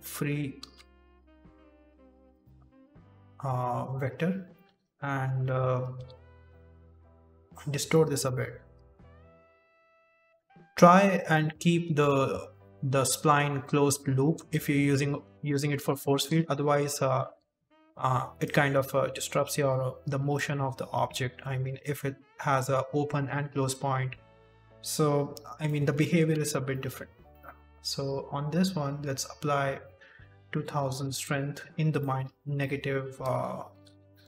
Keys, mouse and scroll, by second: 0.5 ctrl+z, 1.0 v, 2.8 right click, 3.0 r, 4.4 right click, 4.7 r, 5.8 right click, 6.8 right click, 7.0 r, 7.8 right click, 8.7 right click, 9.8 right click, 10.3 right click, 11.1 right click, 12.7 right click, 13.2 right click, 13.8 middle click, 14.6 Tab, 15.0 scroll down 3, 15.3 shift+middle click, 15.7 Tab, 16.1 KP_7, 16.7-17.0 scroll up 2, 17.5 right click, 18.4 right click, 19.4 right click, 20.1 right click, 20.9 right click, 21.6 right click, 23.8 right click, 24.3 right click, 25.6 middle click, 26.3 Tab, 26.6 middle click, 27.2 click, 28.0 click, 29.7 click, 30.7 KP_0, 31.7 click, 32.4 click, 34.0 KP_0.